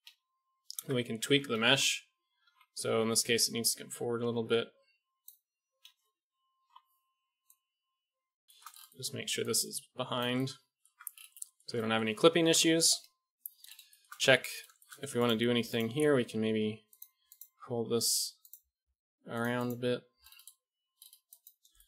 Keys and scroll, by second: 0.0 KP_1, 0.7 Tab, 1.5 KP_1, 1.6 KP_3, 2.4 a, 2.8 a, 5.5 KP_1, 5.7 KP_3, 7.2 g, 10.8 Tab, 11.5 a, 12.5 KP_1, 14.2 Tab, 16.0 g, 17.5 g, 18.7 g, 19.8 g.